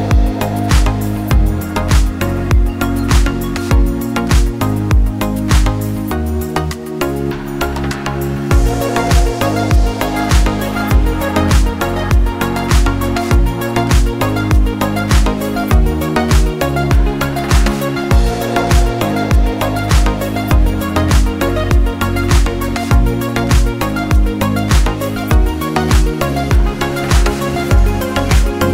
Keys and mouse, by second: 0.5 shift+click, 1.4-1.7 middle drag, 1.9 click, 2.9 ctrl+a, 4.3 shift+click, 4.6-5.1 drag, 5.4-5.8 shift+drag, 6.1 s, 7.5 shift+drag, 7.9-8.5 drag, 9.0 shift+click, 9.9 ctrl+a, 10.8 shift+click, 11.1 drag, 12.3 shift+a, 18.8 r, 23.5 click, 24.2 g, 27.7 s.